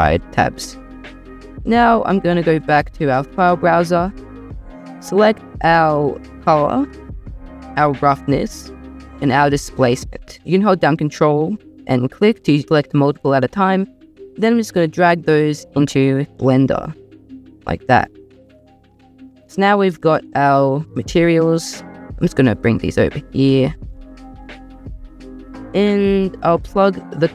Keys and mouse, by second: 19.1 middle click, 20.9 s, 21.9 g, 23.3 g, 23.7 click, 23.9 click, 26.5 click.